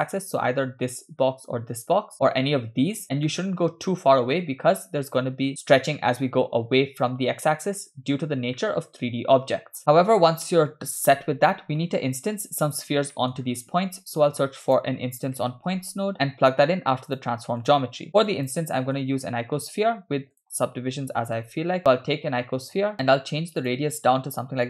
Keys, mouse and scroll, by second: 3.3-4.4 shift+middle drag, 7.6-8.4 scroll down 4, 8.6-10.4 middle drag, 10.9-11.7 scroll down 4, 11.8 middle click, 13.2 middle click, 13.4 scroll up 2, 13.9 shift+a, 18.3 click, 18.8 middle click, 19.5 shift+a, 22.9 click, 23.6-24.6 drag.